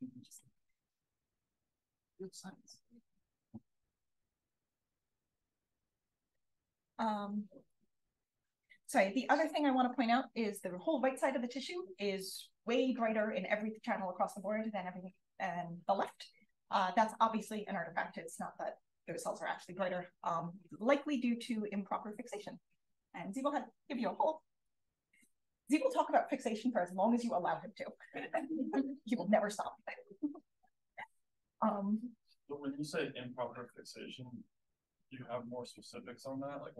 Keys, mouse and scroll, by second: 1.1-4.3 scroll down 1, 4.3-6.2 scroll down 1, 6.2-7.6 scroll down 1, 7.6-8.2 drag, 7.6-8.2 scroll down 1, 8.2-8.8 scroll down 1, 8.8-9.6 scroll up 1, 9.6-11.0 scroll up 1, 11.0-11.5 scroll up 1, 31.3 drag.